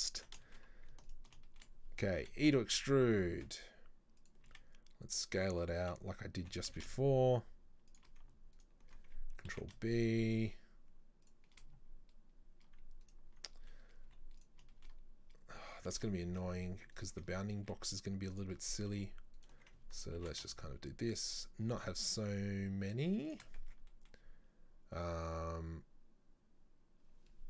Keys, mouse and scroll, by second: 0.5 shift+middle click, 0.8-1.1 scroll up 2, 1.1 alt+right click, 1.5 shift+middle click, 2.3 e, 8.6 alt+right click, 9.6 ctrl+b, 13.1 alt+right click, 13.6 middle click, 13.8 scroll down 1, 14.1 z, 14.8-16.0 shift+middle drag, 16.0 ctrl+z, 16.3 ctrl+z, 17.0 alt+right click, 17.7 s, 18.6 middle click, 19.4 alt+right click, 20.2 ctrl+b, 23.7 Tab, 24.0-27.0 middle drag.